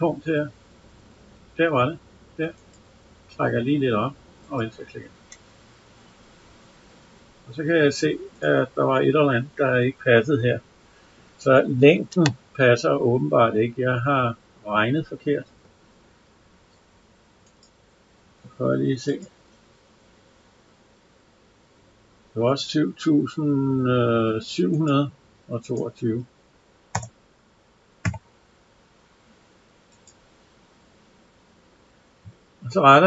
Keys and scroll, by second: 26.8 BackSpace.